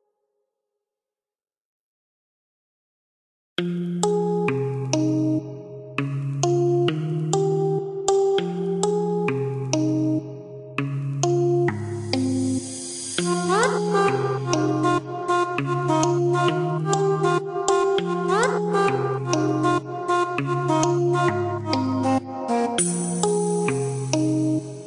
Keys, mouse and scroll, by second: 0.4-2.0 scroll down 1, 2.0 click, 2.9 space, 3.9 click, 4.6 click, 10.7 KP_1, 11.0 KP_0, 12.0 KP_Enter, 13.5 click, 14.3 click, 17.8 click, 20.8 click, 23.1 KP_2, 23.5 KP_Enter.